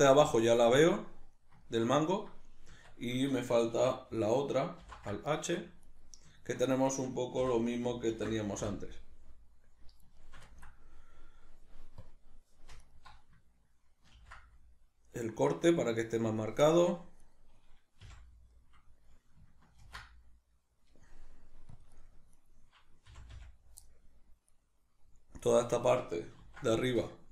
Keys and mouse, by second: 2.7 Tab, 5.8 right click, 6.4 ctrl+middle click, 6.9 right click, 7.4 l, 10.2-12.0 shift+middle drag, 12.0 click, 12.8 alt+right click, 14.2 ctrl+b, 16.4 click, 16.6 middle click, 17.2 right click, 18.0 f, 18.6-22.0 middle drag, 19.8 ctrl+r, 22.4 right click, 23.1 f, 23.8 middle click, 24.5 right click, 25.4 right click, 26.4 ctrl+r.